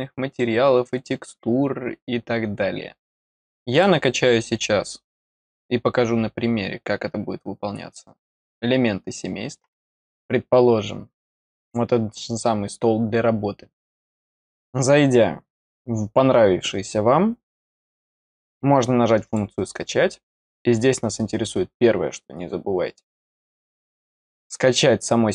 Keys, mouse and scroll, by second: 3.6 click, 10.8-11.2 scroll down 1, 13.7 click, 17.5 scroll down 1, 19.2 click.